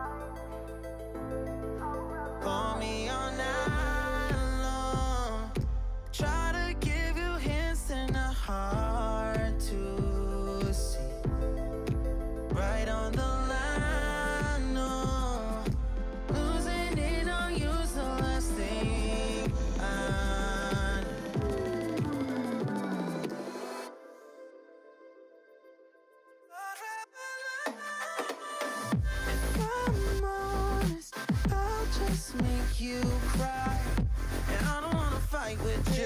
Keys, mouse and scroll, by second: 0.0 middle click, 0.3-1.1 scroll down 4, 1.1 KP_3, 1.3 Tab, 1.5 scroll up 3, 1.7 click, 1.9 Tab, 2.3 drag, 3.1 shift+s, 3.8 scroll down 1, 3.9 middle click, 4.4 scroll down 2, 4.6 middle click, 4.9 Tab, 5.1-6.7 right drag, 6.7 click, 7.2 click, 7.7-8.9 middle drag, 8.9 KP_3, 9.2-10.1 scroll up 7, 9.4 Tab, 10.1 click, 11.0 shift+s, 11.6 Tab, 11.8-12.7 right drag, 12.7 scroll down 3, 12.9 middle click, 13.5 click, 14.1 click, 14.7 KP_3, 14.9-15.6 scroll up 5, 15.1 Tab, 15.6 click, 17.0 shift+middle click, 17.2-17.8 scroll up 2, 17.8-19.1 drag, 19.1 shift+s, 19.7 Tab, 19.9-20.7 right drag, 20.7 scroll down 5, 21.0-21.5 middle drag, 21.5 click, 22.6 shift+c, 22.8-23.2 scroll up 4, 23.2 click, 23.7 click, 24.3 middle click, 24.5-25.0 scroll down 3, 25.0 alt+z, 25.2 click, 25.6 drag, 26.0 click, 26.4 click, 26.8 middle click, 27.3 click, 28.3 ctrl+KP_3, 28.6 shift+middle click, 28.8-29.4 scroll up 6, 29.1 shift+middle click, 29.4 Tab, 29.8 alt+z, 30.0-30.9 drag, 30.9 shift+middle click, 31.2 scroll up 2, 31.4 shift+s, 32.1 Tab, 32.4-33.4 right drag, 33.4 click, 34.2 Tab, 34.7 Tab, 34.9-35.7 scroll down 5, 35.1 middle click, 35.7 click.